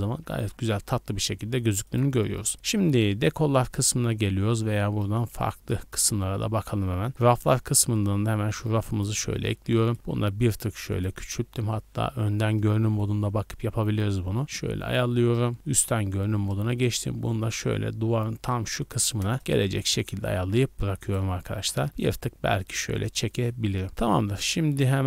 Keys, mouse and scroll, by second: 0.0 scroll down 1, 0.3 z, 1.8 click, 5.1-8.3 drag, 9.4 scroll down 1, 9.8 shift+middle drag, 9.9 s, 10.9 click, 11.4 KP_1, 12.1 z, 12.4-13.8 scroll down 6, 12.8 shift+middle click, 14.0 shift+middle click, 14.1 scroll up 1, 14.8 click, 14.8 s, 15.7 KP_7, 16.4 scroll down 1, 16.6 shift+middle drag, 17.0 g, 18.8 click, 19.2 KP_0, 19.4 z, 19.8 scroll up 2, 20.2 a, 20.3 a, 21.0 right click, 21.4 g, 21.7 x, 22.1 click, 22.7 a, 23.0 scroll down 1, 23.3-23.6 shift+middle drag, 23.6 scroll up 2.